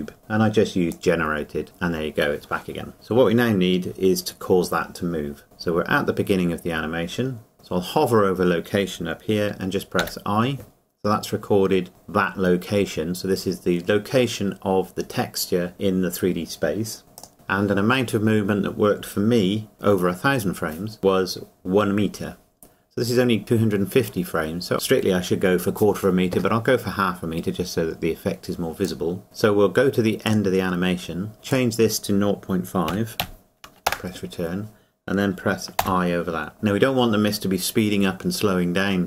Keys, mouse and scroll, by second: 0.9 click, 1.0 click, 17.2 click, 17.8 click, 28.8 click, 29.2 Escape, 32.9 KP_Decimal, 34.2 KP_Enter.